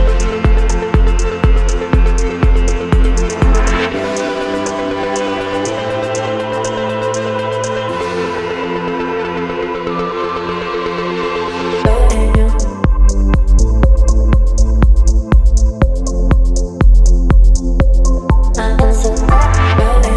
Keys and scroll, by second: 0.1 [, 2.7 Caps_Lock, 4.1 space, 9.9-10.7 typing, 13.5 ], 13.6 ].